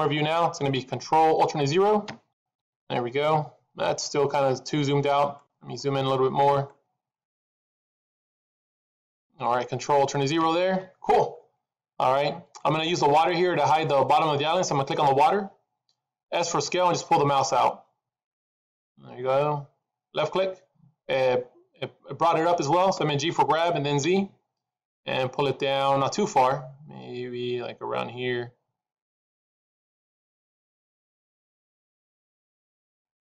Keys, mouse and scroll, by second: 2.0 ctrl+alt+KP_0, 2.9 scroll up 2, 3.8 scroll down 2, 4.6 middle click, 5.4-5.8 scroll up 2, 5.9 middle click, 6.7-7.5 scroll up 1, 7.5 middle click, 10.3 ctrl+alt+KP_0, 12.4 click, 14.8 click, 16.4 s, 23.4 g.